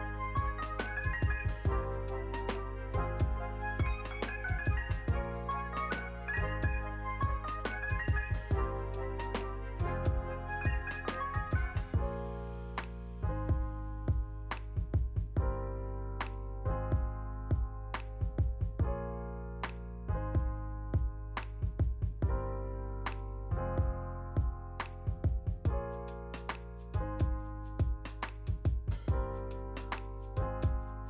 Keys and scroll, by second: 0.1 space, 3.1 ctrl+s, 10.0 shift+r, 19.2 ctrl+s.